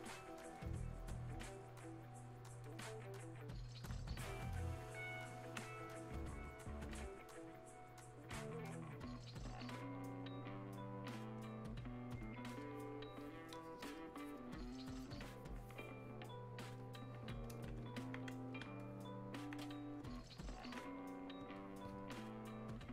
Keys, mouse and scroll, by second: 6.2-14.8 ctrl+shift+drag, 16.7-22.9 drag.